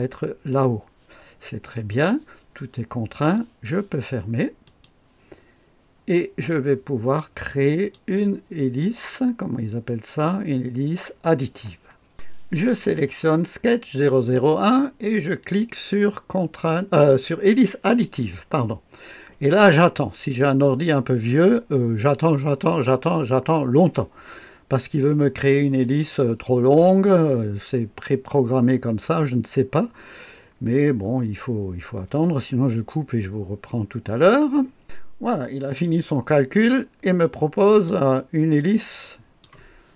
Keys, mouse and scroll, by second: 4.6 click, 5.4 drag, 6.4-7.9 drag, 12.1 click, 17.4 click, 34.8 click, 35.7-37.9 drag, 38.6 click.